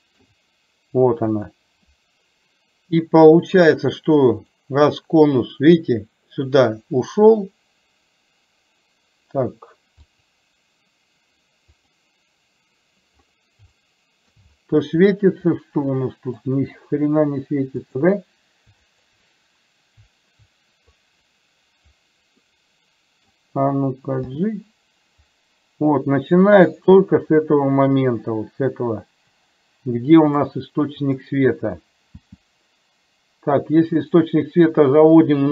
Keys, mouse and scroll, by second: 1.4 click, 7.5-9.5 middle drag, 10.2 click, 11.9 click, 13.9-14.4 shift+middle drag, 15.7-16.5 middle drag, 17.9 click, 19.2 shift+click, 21.0-21.4 drag, 22.4-23.4 middle drag, 24.4 g, 30.3 click, 31.2 click, 32.3 g.